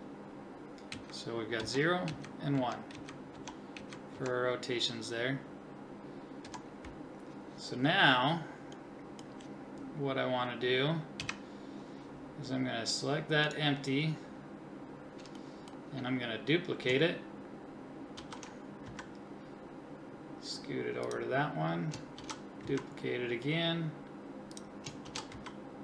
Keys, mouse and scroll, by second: 0.9 Right, 1.6 Left, 2.1 Right, 2.6 Left, 2.9 Right, 3.3 Left, 3.8 Right, 4.2 Left, 6.5 Left, 11.2 KP_1, 14.4-15.4 drag, 18.2 shift+d, 22.2 shift+d, 25.1 shift+d.